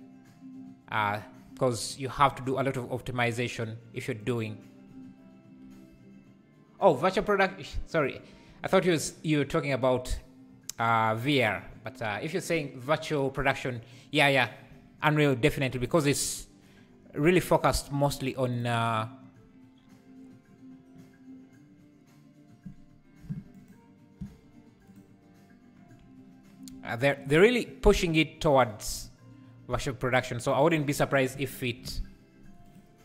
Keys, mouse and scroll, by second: 2.2 click, 2.6 Tab, 4.3 click, 8.0 shift+click, 15.9 u, 18.5 click, 23.6 ctrl+shift+click, 24.9-27.3 drag, 30.7 a, 31.4 r.